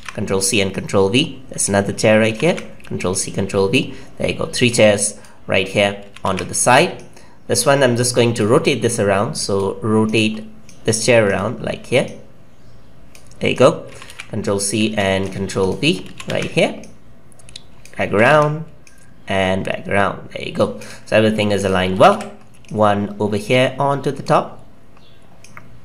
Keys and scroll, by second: 2.2 ctrl+c, 2.4 ctrl+v, 6.0 ctrl+c, 6.2 ctrl+v, 13.8 ctrl+c, 14.0 ctrl+v, 14.8 ctrl+z, 16.0 ctrl+c, 16.2 ctrl+v, 18.0 ctrl+c, 18.2 ctrl+v, 21.8 ctrl+c, 22.0 ctrl+v.